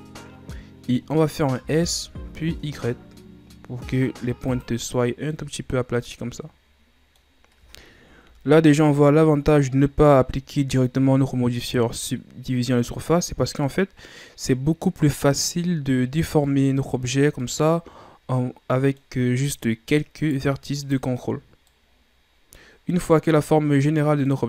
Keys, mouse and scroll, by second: 1.6 s, 4.8-8.2 middle drag, 8.2 KP_1, 14.3-15.6 middle drag, 15.6-16.2 scroll up 1, 16.2 scroll down 4, 16.4-20.1 middle drag, 20.1 right click, 20.8 right click, 21.6-24.4 middle drag.